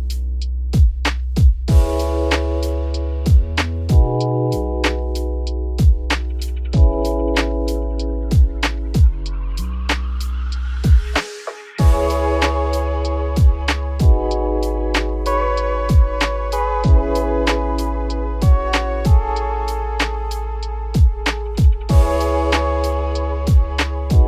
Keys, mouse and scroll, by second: 8.9 click, 16.9 scroll up 1, 17.8 click, 19.0 shift+click, 20.5 shift+click.